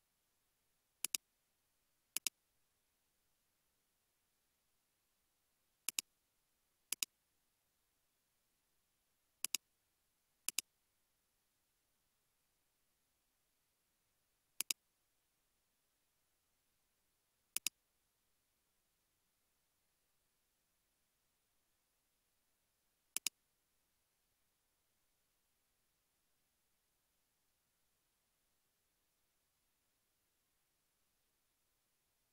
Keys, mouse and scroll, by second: 2.9 typing, 4.5 typing, 7.5-9.0 typing, 19.5 typing, 20.9 typing, 20.9 Return, 23.9 space.